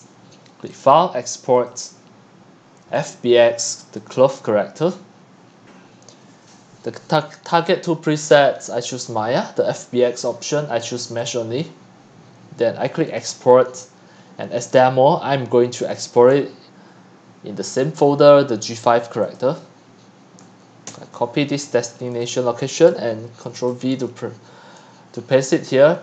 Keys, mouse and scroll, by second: 0.7 scroll, 0.8-3.5 drag, 3.9 click, 5.8-6.3 drag, 8.2-9.6 drag, 10.3-11.3 drag, 13.2 click, 15.8 click, 19.2 click, 20.9 ctrl+c, 22.1 click, 23.5 ctrl+v.